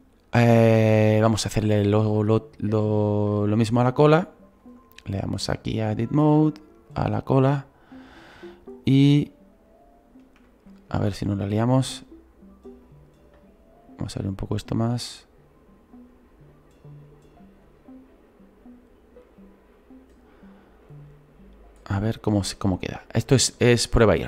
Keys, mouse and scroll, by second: 4.2 right click, 4.6 right click, 6.2 click, 6.9-8.7 right drag, 8.7 click, 10.9 ctrl+z, 12.8-20.0 drag, 20.9-24.2 drag.